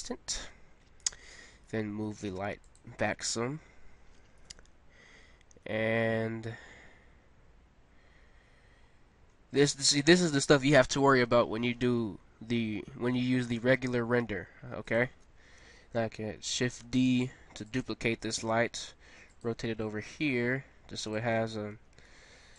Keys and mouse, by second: 1.7 g, 8.5 middle click, 11.2 KP_7, 12.8 r, 13.9 g, 16.8 shift+d, 18.3 r, 19.9 g, 21.8 r.